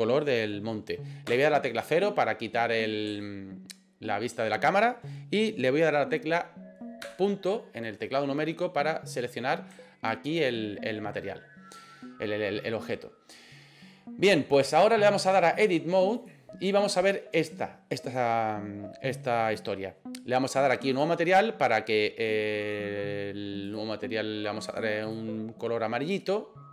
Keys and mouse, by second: 1.3 KP_0, 3.2 middle click, 7.1 KP_Decimal, 8.0-9.4 middle drag, 9.4 click, 9.4 middle click, 9.9-11.1 shift+middle drag, 15.4 click, 20.9 click, 23.7-24.9 drag, 25.2 click, 26.1 click.